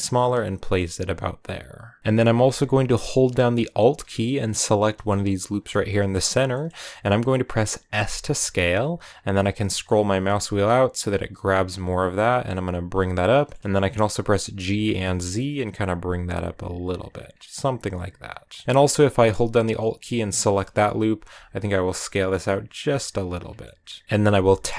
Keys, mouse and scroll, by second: 0.2-0.6 scroll down 5, 0.6-4.4 middle drag, 4.5 alt+right click, 5.5 scroll down 1, 5.8-7.7 middle drag, 7.7 s, 13.3 shift+middle click, 13.6-14.1 scroll up 1, 14.4 g, 17.1 scroll down 1, 17.3-18.7 middle drag, 18.7-19.2 scroll up 2, 20.0 alt+right click, 20.4 middle click, 20.7 scroll up 1, 21.1 s, 23.2 scroll down 1, 23.4 middle click, 24.2 scroll up 2.